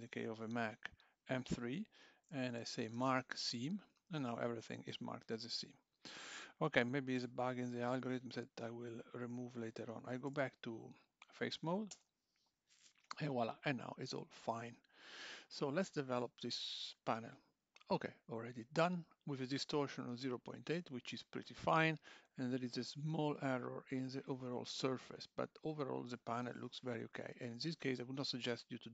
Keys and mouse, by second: 9.0 click, 9.5 2, 10.3 3, 11.1 click, 11.9 l, 16.2 click, 28.5 click.